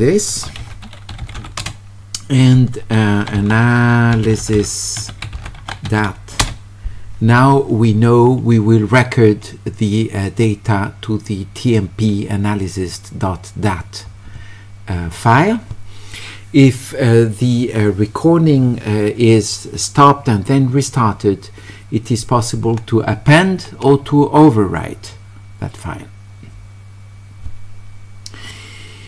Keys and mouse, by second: 3.3 q, 4.4-6.3 typing.